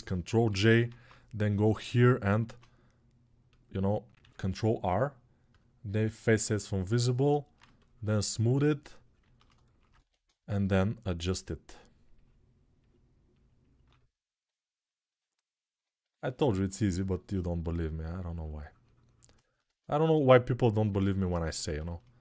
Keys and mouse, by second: 0.3 ctrl+j, 0.6 ctrl+Tab, 2.1 shift+r, 4.6 shift+r, 5.3 click, 5.9 ctrl+r, 10.0 1.